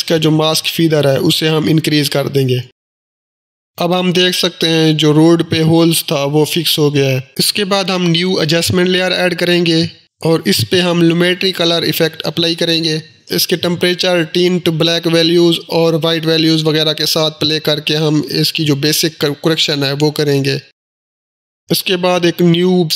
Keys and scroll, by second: 9.2 Return, 9.5-11.3 typing, 9.6 Return, 11.5 Down, 12.5 Return.